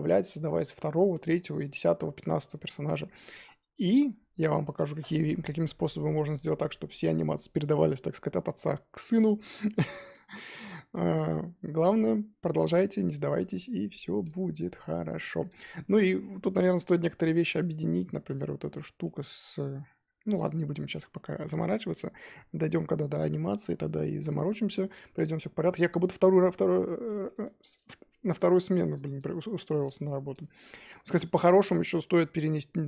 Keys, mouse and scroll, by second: 0.1-9.4 middle drag, 9.4-10.1 scroll up 2, 10.1-11.8 middle drag, 11.8 click, 12.1 scroll up 2, 12.6 click, 12.7-13.6 scroll up 2, 13.6 click, 14.8-15.6 scroll down 3, 15.6 shift+middle drag, 15.8 scroll up 3, 16.7 shift+click, 17.0-17.6 scroll down 2, 17.6-18.3 scroll up 1, 18.3 shift+click, 18.8-20.4 shift+middle drag, 20.4 click, 21.1-21.6 scroll down 3, 21.7 middle click, 22.2-24.7 scroll up 2, 24.7-25.1 scroll down 3, 25.1-27.3 middle drag, 27.3-27.8 scroll up 2, 27.8 click, 28.3 click, 28.7-29.3 shift+middle drag, 29.3 click, 29.9 click, 30.4 click, 30.6-31.2 shift+middle drag, 31.2 click.